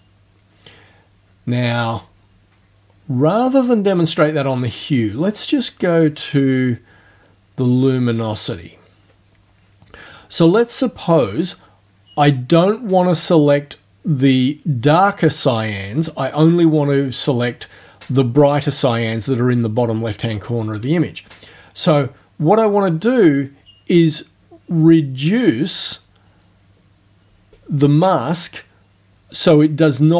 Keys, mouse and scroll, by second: 5.9 click, 22.6-27.7 drag.